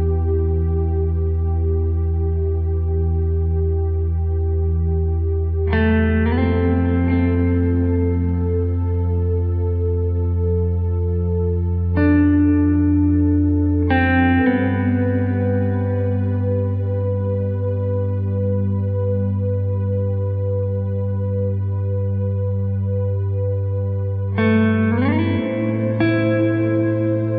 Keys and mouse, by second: 1.2 right click, 1.4 g, 2.7 KP_3, 3.5 alt+z, 4.0 alt+z, 4.9 right click, 5.1 g, 6.2 g, 9.0 g, 9.6 alt+z, 10.5 middle click, 11.0 alt+z, 13.4 KP_3, 14.3 s, 16.0 r, 16.7 alt+z, 20.2 s, 21.2 g, 21.6 KP_1, 22.1 alt+z, 22.5 s, 23.6 g, 24.8 g, 26.2 middle click.